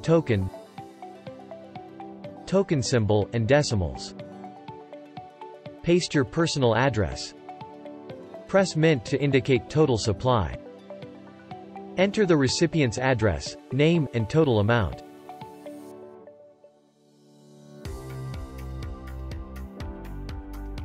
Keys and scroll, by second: 1.0-3.7 typing, 8.4 ctrl+v, 11.8 ctrl+v, 14.0 t, 14.1 e, 14.3 a, 14.5 m, 18.8 BackSpace.